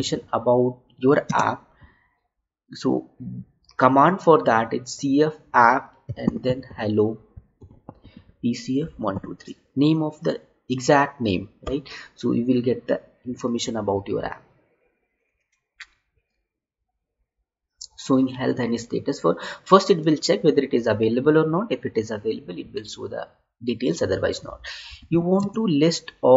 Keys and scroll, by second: 1.2 space, 25.6 space.